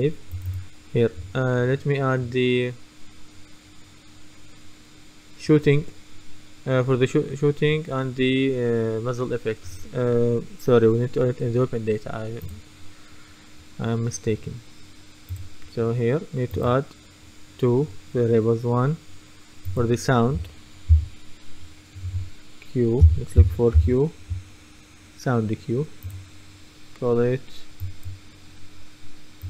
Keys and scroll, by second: 21.0 s, 22.1-24.3 typing.